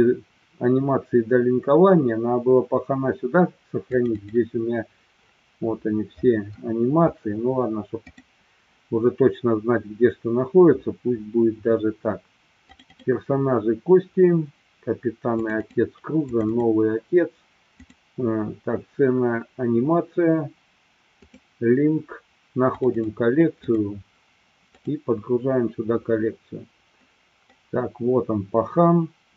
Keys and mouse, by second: 27.4-29.3 middle drag.